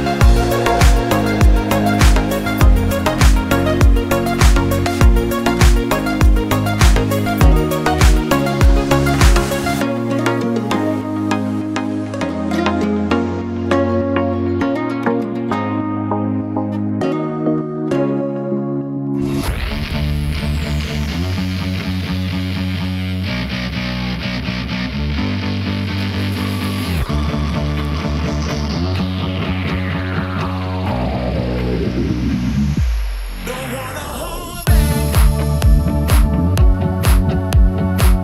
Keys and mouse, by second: 1.0 shift+middle click, 1.3-1.6 drag, 2.5 shift+click, 3.6 shift+click, 5.4 Tab, 5.7 click, 6.1 Tab, 6.9 ctrl+r, 10.3 ctrl+b, 14.6 click, 18.2 click, 18.6 3, 19.0 click, 20.5 shift+click, 22.1 alt+e, 26.3 shift+click, 27.8 click, 28.7 shift+click, 30.5 shift+middle click, 30.8-33.8 middle drag, 34.0 shift+middle click, 36.2 middle click, 37.7-38.2 drag.